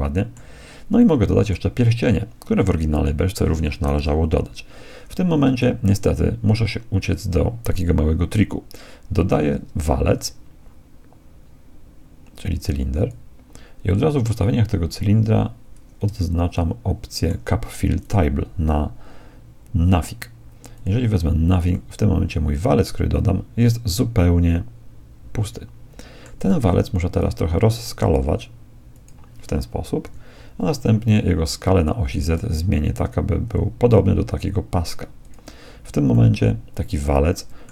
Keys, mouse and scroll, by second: 1.0-3.0 middle drag, 4.0 KP_1, 9.1 shift+a, 16.6-18.0 middle drag, 16.6-17.2 scroll down 1, 18.0-19.8 drag, 21.7-23.7 middle drag, 27.2 s, 30.0 KP_1, 32.1 s, 36.2-37.7 middle drag.